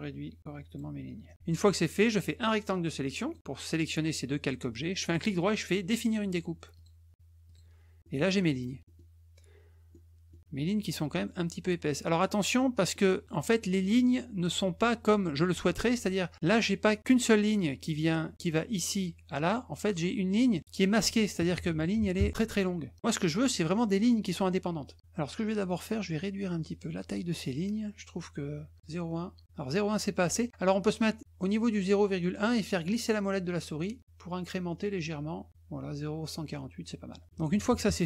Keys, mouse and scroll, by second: 1.3 click, 2.2-3.3 drag, 5.1 right click, 6.7 click, 7.4 click, 8.0 middle click, 8.3 middle click, 8.5 middle click, 8.8 middle click, 9.9 middle click, 12.6 middle click, 13.8 middle click, 20.4 click, 23.4 middle click, 23.6 middle click, 23.7 middle click, 25.7 click, 26.7 click, 28.7 click, 32.8 scroll up 1, 33.4 scroll up 1, 34.9 scroll down 1.